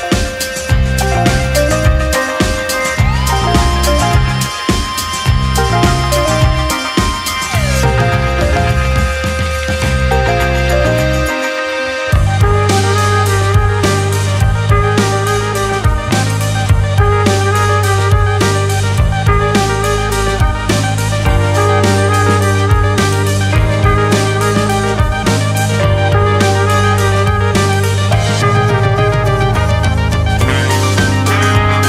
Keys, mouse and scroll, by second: 0.5 g, 1.4 click, 1.7 g, 2.9 click, 3.1 g, 3.7-4.1 scroll down 1, 4.1 click, 4.3 g, 5.1 click, 5.2 g, 6.1-6.8 scroll down 1, 6.8-7.6 scroll down 1, 8.0 click, 8.3-11.2 typing, 8.9 click, 9.7 click, 10.4 click, 11.1 click, 12.2 click, 12.4 g, 13.2 click, 13.4 g, 14.8 ctrl+z, 15.1 ctrl+z, 16.1 shift+middle click, 16.4-17.0 scroll up 1, 17.0 ctrl+r, 18.4 ctrl+r, 20.6 click, 21.2 g, 22.0 click, 22.2 g, 22.8 click, 23.0 g, 24.1 click, 24.3 g, 25.5 click, 25.9 g, 26.8 click, 26.9 g, 28.3 click, 28.5 g, 30.2 click, 30.3 g, 31.0 scroll down 1.